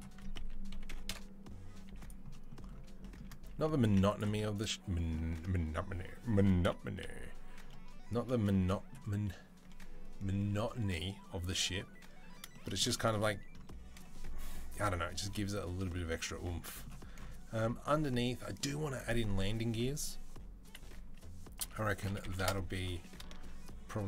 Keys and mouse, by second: 0.1 s, 1.5 s, 6.4 KP_7, 19.6-20.6 drag, 20.6-24.0 middle drag, 21.3 s, 22.7 g.